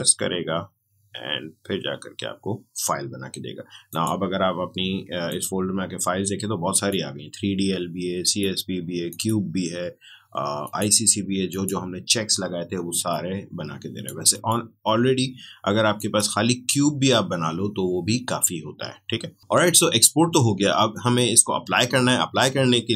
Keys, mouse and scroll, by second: 3.8 click.